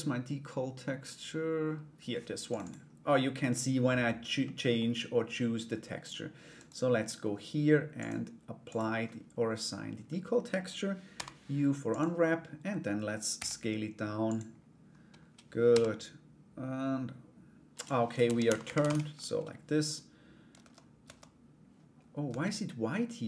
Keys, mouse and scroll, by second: 4.0 middle click, 6.1 right click, 7.5 click, 8.2 click, 12.9 s, 15.2 g, 17.8 r, 20.1 Tab, 22.5 middle click.